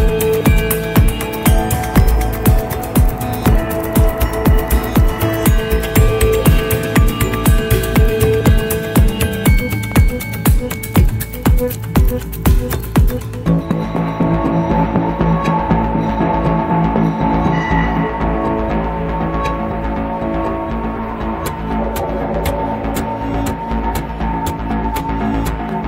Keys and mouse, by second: 1.1-2.2 middle drag, 3.4-5.3 drag, 5.6-8.3 middle drag, 9.0 middle click, 10.4 click, 13.3 shift+a, 24.7-25.8 middle drag.